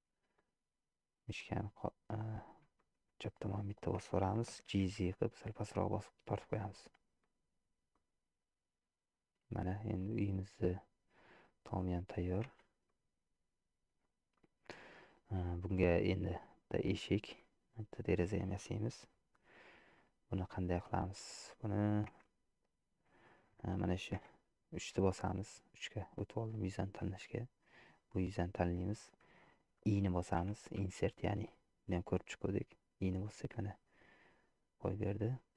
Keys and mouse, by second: 1.4 middle click, 2.9 shift+middle click, 4.9 g, 8.0-9.3 middle drag, 10.2-11.4 middle drag, 11.9 middle click, 12.6 Tab, 12.9-14.2 middle drag, 14.8 middle click, 16.1 middle click, 17.4 middle click, 20.0 middle click, 21.2 middle click, 22.3 Tab, 23.3 shift+middle click, 24.2 3, 27.7-29.1 middle drag.